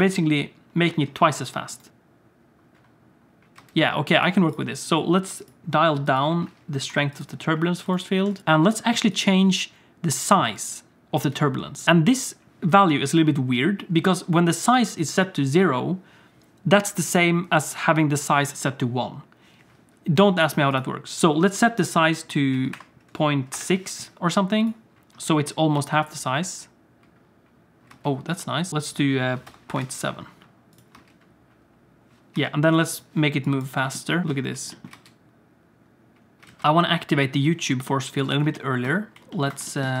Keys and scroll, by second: 1.9 Tab, 1.9 space, 3.6 space, 8.4 Tab, 8.4 space, 10.5 space, 11.2 space, 25.8 space, 27.9 space, 31.0 space, 32.3 space, 33.8 g, 34.2 alt+shift+z, 34.2 space, 34.9 space, 36.5 alt+shift+z, 36.6 alt+a, 36.6 ctrl+s.